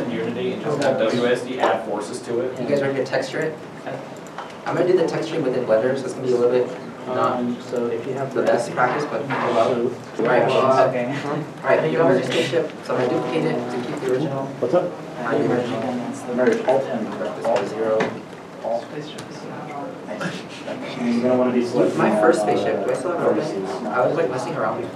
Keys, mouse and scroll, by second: 9.5 middle click, 13.3 shift+d, 17.9 0, 18.0 Tab, 18.3 Return, 19.7 middle click, 22.5 alt+Tab, 23.3 alt+s.